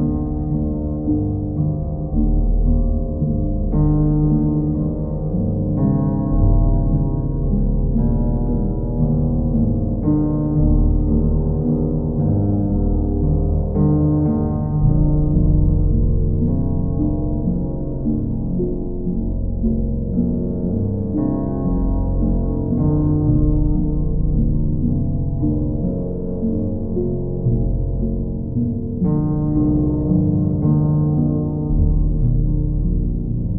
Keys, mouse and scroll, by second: 2.2 click, 2.6 shift+click, 3.3 click, 4.4 alt+click, 6.8 click, 8.4 click, 9.2 alt+click, 10.4 alt+click, 10.5 shift+click, 12.3 alt+click, 13.6 alt+click, 14.8 alt+click, 16.3 alt+click, 16.8 alt+click, 18.9 alt+click, 19.1 ctrl+click, 19.3 ctrl+click, 20.3 ctrl+click, 20.8 ctrl+click, 21.3 w, 25.7 click, 26.7 ctrl+click, 28.5 ctrl+click, 29.8 ctrl+click, 31.0 ctrl+click, 32.5 ctrl+click.